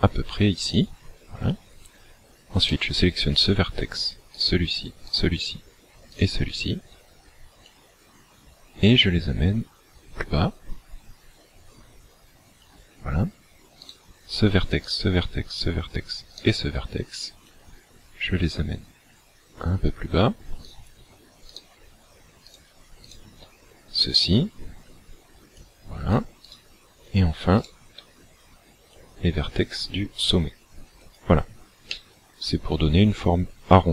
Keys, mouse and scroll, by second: 0.9 click, 2.7 right click, 4.4 shift+right click, 5.1 shift+right click, 6.2 shift+right click, 7.7 click, 13.9 right click, 14.9 shift+right click, 15.5 shift+right click, 16.3 shift+right click, 17.5 click, 20.7 right click, 21.5 shift+right click, 22.5 shift+right click, 23.1 shift+right click, 23.9 click, 26.5 right click, 27.6 shift+right click, 29.0 click, 32.0 middle click.